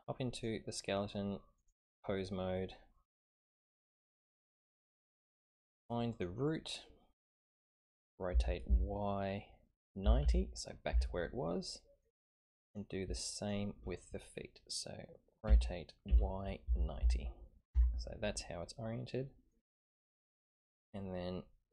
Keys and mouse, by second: 0.3-1.7 drag, 3.5-4.2 middle drag, 4.7 click, 5.7 click, 6.1 click, 8.3 r, 11.5-12.0 drag, 12.6 click, 13.3 shift+click, 15.4 r, 18.2-19.5 middle drag.